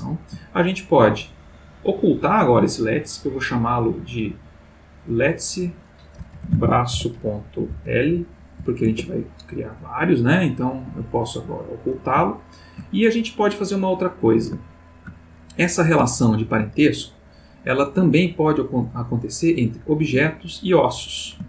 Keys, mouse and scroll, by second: 0.0 ctrl+middle click, 0.8 ctrl+click, 3.1-3.6 drag, 3.9 click, 4.2 click, 4.7 click, 5.1 click, 6.3-8.1 typing, 8.8 shift+Return, 11.1 click, 12.3-13.0 shift+middle drag, 13.4 click, 14.7-15.4 ctrl+middle drag, 16.1-16.7 ctrl+middle drag, 19.0 click, 20.4 click.